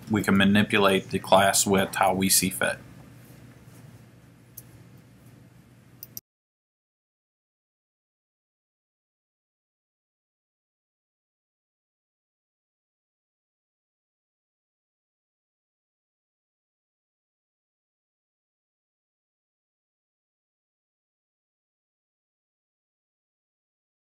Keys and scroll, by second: 15.7 Right.